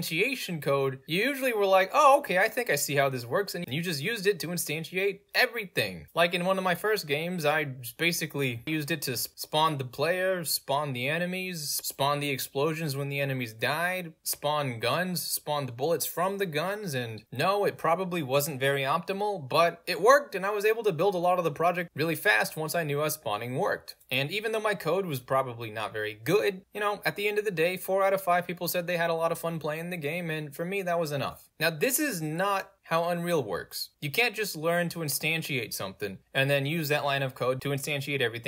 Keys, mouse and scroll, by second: 2.8-4.9 drag, 8.9 click, 31.5 middle click.